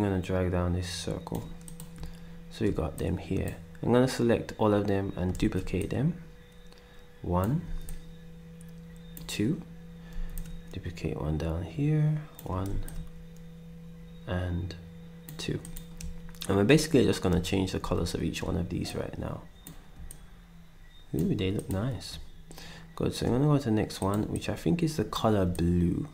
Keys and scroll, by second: 5.4 ctrl+d, 7.6 d, 10.1 d, 12.7 d.